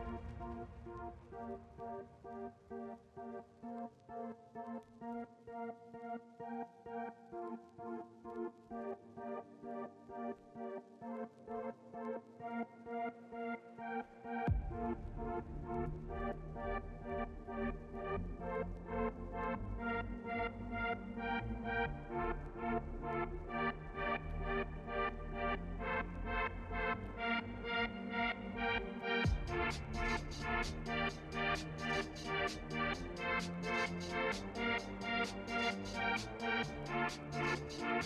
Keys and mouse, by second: 1.3 shift+middle click, 1.9 s, 2.7 click, 3.3 shift+middle click, 3.8 e, 6.2 s, 7.2 f, 8.3 g, 11.6 a, 12.1 shift+n, 12.3 Tab, 12.7 KP_1, 13.5 Tab, 14.2 g, 16.0 shift+d, 17.6 shift+d, 20.0 click, 20.3 l, 20.8 g, 23.2 Tab, 24.1 shift+click, 24.8 alt+d, 28.6 shift+click, 29.6 g, 31.8 click, 32.0 middle click, 32.4 ctrl+s, 33.5-35.0 middle drag, 35.5 click, 37.1 click, 37.6 middle click.